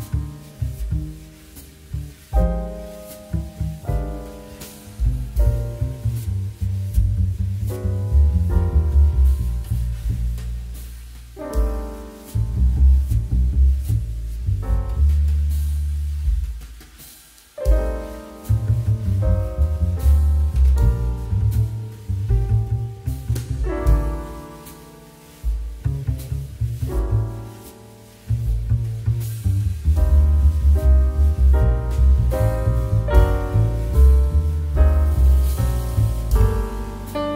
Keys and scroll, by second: 6.1 Escape, 6.4 c, 7.5 z, 9.3 v, 23.6 space, 27.0 space.